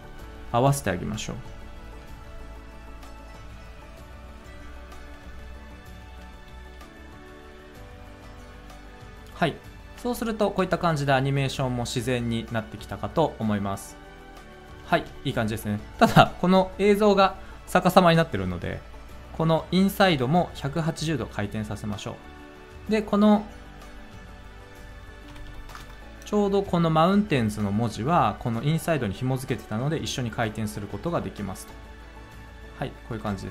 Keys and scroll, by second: 6.2 space, 9.9 space, 14.8 space, 20.0 r, 25.2 1, 25.6 0, 25.7 Return, 33.2 space.